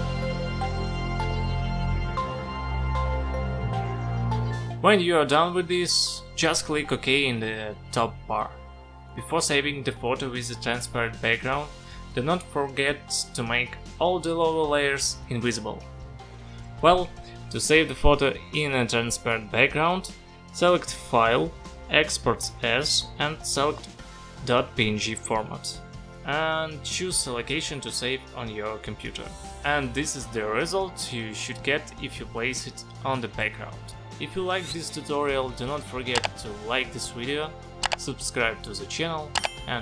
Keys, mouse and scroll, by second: 0.4 space, 0.8 ], 1.0 click, 2.2 space, 2.3 click, 3.8 space, 3.9 click, 6.7 click, 9.1 click, 12.4 click, 13.6 shift+b, 14.8 shift+g, 15.5 Return, 16.7 click, 18.5 click, 19.0 click, 19.9 click, 21.5 click, 27.9 click.